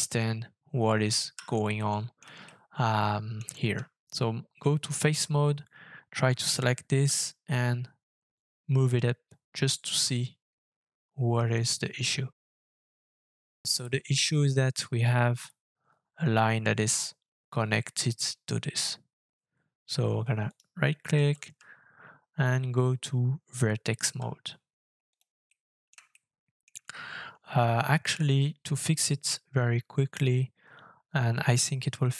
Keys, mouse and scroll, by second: 0.0-1.3 Tab, 1.7 middle click, 2.5 shift+middle click, 3.7-4.5 Tab, 7.0 g, 20.5 right click, 21.5 Right, 22.0-24.1 Tab, 25.5 middle click, 26.1 shift+middle click, 31.9 shift+middle click.